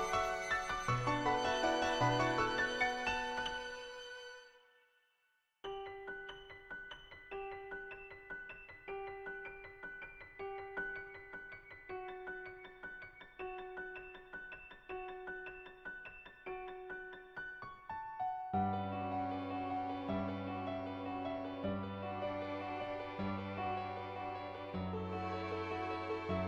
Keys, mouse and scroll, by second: 0.6 middle click, 1.3 click, 1.7 shift+click, 3.0 shift+click, 3.3 middle click, 6.6 shift+click, 7.3 click, 8.8 click, 10.0 shift+click, 12.0 click, 22.8 shift+click, 24.4 click, 25.5 ctrl+z, 25.5 [, 25.9 click.